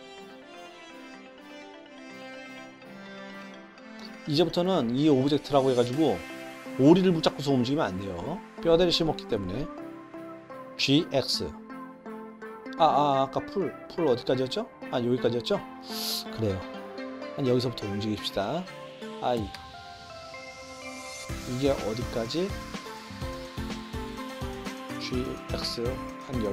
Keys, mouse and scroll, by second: 0.5 middle click, 1.0-2.2 middle drag, 2.5 space, 2.6 click, 2.9 click, 3.1 middle click, 3.2 click, 3.6 g, 8.9-9.3 middle drag, 10.8 g, 13.9 click, 19.5 i, 23.0-23.4 middle drag, 24.1-24.6 middle drag, 25.0 g.